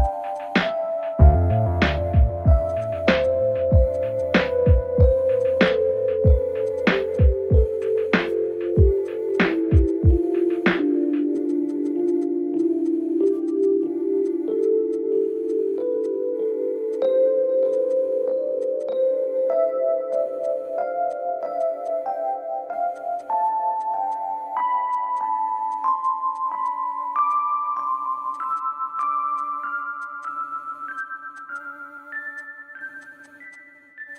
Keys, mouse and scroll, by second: 0.0 space, 0.3 click, 2.7 space, 3.2-5.3 drag, 5.3 space, 5.6 click, 6.7 space, 6.8 click, 6.8 space, 7.1-9.0 drag, 9.0 space, 9.1 click, 9.1 space, 9.3-14.9 drag, 14.9 space, 15.2 ctrl+z, 15.4-17.6 drag, 17.6 space, 17.9 click, 18.5 space, 18.6 click, 18.6 space, 18.8 click, 20.0 space, 20.1 click, 20.2 space, 20.4-21.5 drag, 21.5 space, 21.6 click, 21.6 space, 21.8 click, 22.9 space, 23.2 click, 23.7 space, 24.1 click, 24.8 space, 25.1-26.3 drag, 26.3 space, 26.6 click, 27.0 ctrl+z, 27.3 click, 28.2-29.9 typing, 28.3 click, 28.5 click, 29.0 click, 29.3 click, 32.7 click, 33.0 click, 33.2 space, 33.5 click, 34.1 space.